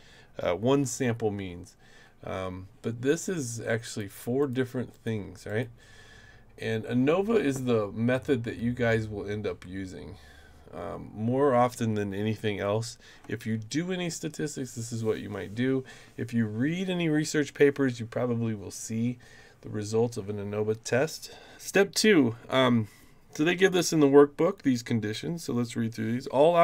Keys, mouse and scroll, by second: 3.9 click, 4.4 click, 4.9 click, 5.5 click.